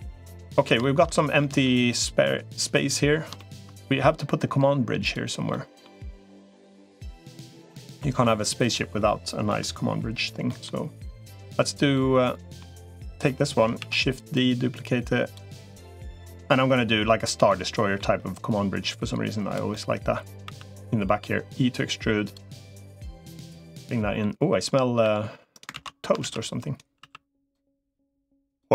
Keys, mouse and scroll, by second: 0.2 middle click, 0.6 shift+middle click, 1.2 middle click, 1.7 click, 3.2-4.4 shift+middle drag, 5.3 middle click, 6.3-7.3 drag, 7.5 middle click, 8.8 middle click, 10.2 middle click, 11.7 middle click, 13.1 middle click, 13.7 shift+d, 14.3 click, 15.9 click, 17.1 middle click, 18.1-19.3 drag, 19.5 middle click, 20.3 e, 22.7 click, 23.5 middle click, 24.9 e, 25.5 ctrl+z, 26.1 shift+d, 26.9 s, 27.9 click, 28.5 e.